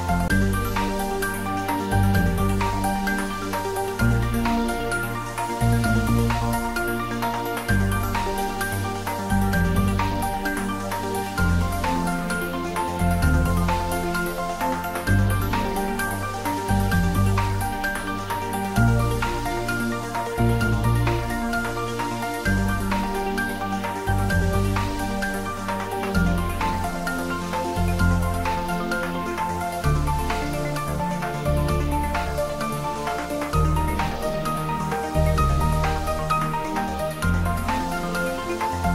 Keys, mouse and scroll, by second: 0.7-2.5 typing, 3.6-5.4 typing, 6.7-7.2 typing, 11.4 1, 13.0 Tab, 13.8 click, 14.7 Tab, 15.4 shift+z, 16.0 click, 16.8 scroll down 1, 17.8-19.9 middle drag, 20.1-20.7 scroll down 1, 20.7-21.3 middle click, 21.8 ctrl+z, 22.9 scroll up 1, 25.0-25.6 middle drag, 26.2 click, 27.4 shift+z, 28.0-28.7 drag, 30.5 Tab, 31.2-31.8 drag, 33.7 Tab, 34.5-35.2 drag, 37.8 click.